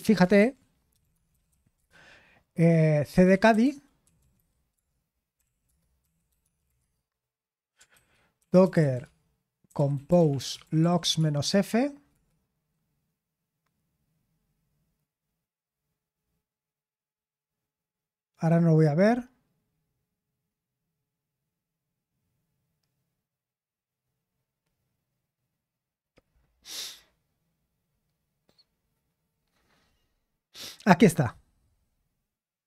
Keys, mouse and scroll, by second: 0.0 click, 0.3 ctrl+c, 0.6-7.1 typing, 8.5-12.6 typing, 31.6-32.6 drag.